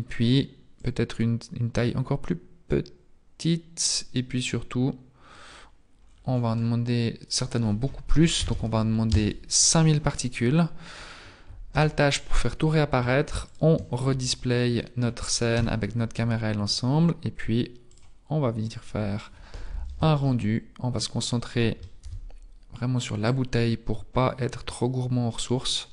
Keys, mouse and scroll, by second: 1.1 click, 9.2 click, 9.2-9.8 scroll up 10, 9.2 KP_0, 10.3-10.6 scroll down 5, 11.8 alt+h, 12.3-13.5 scroll down 2, 13.5 shift+click, 14.4-14.9 scroll down 4, 15.6 KP_0, 16.1 scroll up 2, 17.9 click, 20.4 shift+middle click, 21.9 ctrl+b, 24.6 ctrl+b.